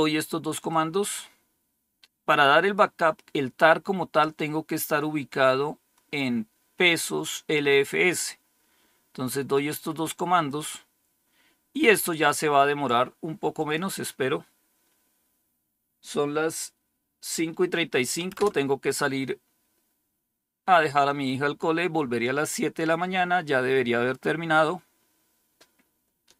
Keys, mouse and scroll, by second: 0.6-2.7 drag, 9.4 right click, 10.3 click, 11.9 right click, 13.4 click, 18.2 Return.